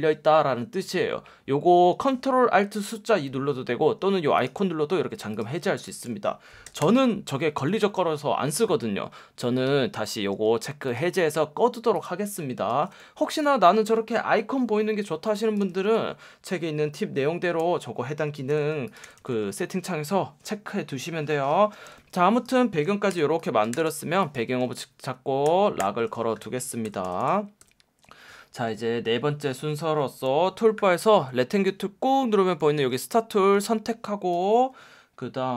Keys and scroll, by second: 6.8 super+k, 10.3 F1, 12.7 F1, 13.2 v, 15.1 space, 15.7 v, 18.5 v, 21.8 v, 23.1 BackSpace, 25.8 super+2, 26.8 super+0, 27.0 super+-, 27.6 super+=, 32.7 F1.